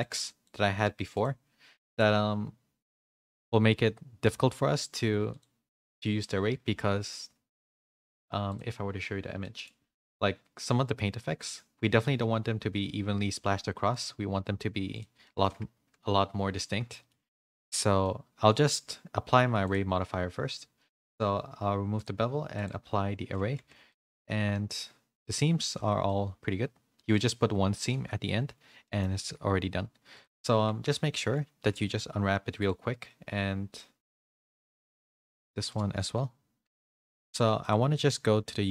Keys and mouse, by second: 1.1 click, 1.9-4.4 drag, 5.3-8.5 drag, 9.4 middle click, 14.9 click, 15.2 middle click, 16.9 shift+middle click, 17.2 click, 17.4 middle drag, 18.0 Tab, 18.0 middle click, 18.8 Tab, 19.6 click, 22.5 click, 23.1 ctrl+a, 23.5 Tab, 23.9-25.6 middle drag, 25.7 a, 26.0-27.1 middle drag, 28.8 middle click, 29.2 Tab, 30.5 Tab, 30.9 a, 31.7 u, 34.6 Tab, 35.2 Tab, 35.6 a, 36.6 u.